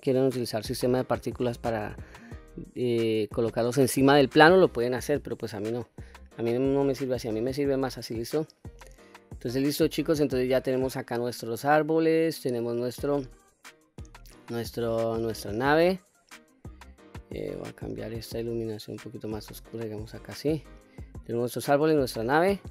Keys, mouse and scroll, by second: 2.8-3.2 middle drag, 5.8-6.2 scroll down 1, 6.2-6.8 middle drag, 7.3-7.7 middle drag, 9.2-10.5 middle drag, 15.6 click, 17.6-20.6 drag, 20.9-21.7 middle drag, 22.2 scroll up 2.